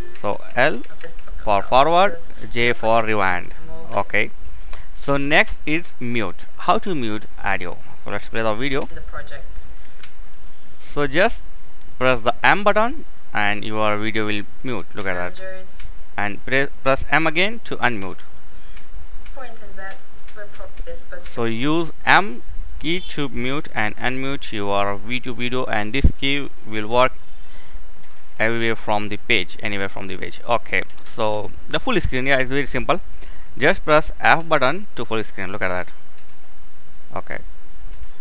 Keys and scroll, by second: 0.0-3.2 typing, 8.2 k, 9.4 m, 14.6 m, 15.2 m, 17.2-20.7 typing, 22.3-23.2 typing, 29.8 typing, 33.8 f.